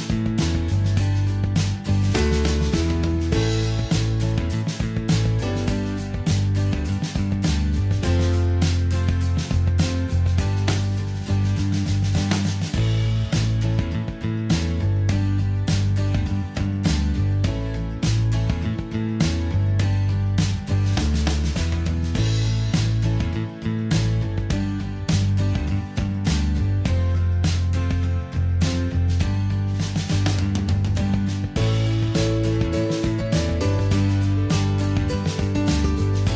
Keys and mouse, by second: 0.5 a, 7.7 ctrl+shift+c, 13.0 a, 14.1 g, 15.7 right drag, 16.3 right click, 20.5 g, 22.3 g, 25.2 g, 26.2-27.3 middle drag, 31.7 a.